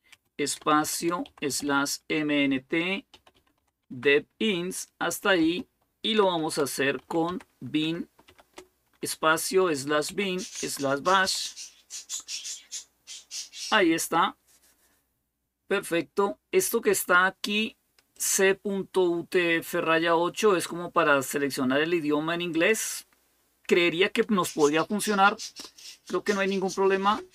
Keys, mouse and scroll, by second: 0.0-1.5 typing, 2.9-4.1 typing, 5.2-8.1 typing, 9.6-11.5 typing, 17.9-26.9 drag, 26.9 Return.